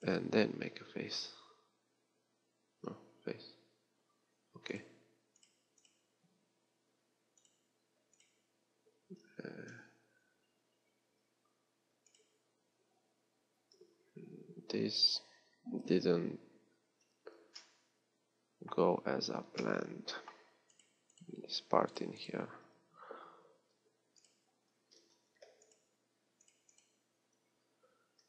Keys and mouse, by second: 0.7 j, 4.2 f, 25.1 z.